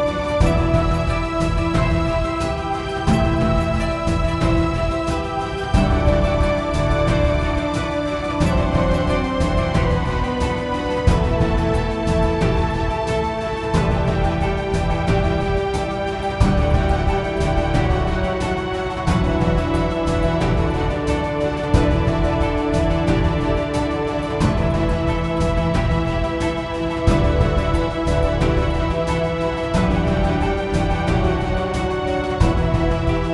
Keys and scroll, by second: 6.8-8.8 typing, 10.5-12.0 typing, 20.9-21.8 typing, 33.0 0, 33.2 Return.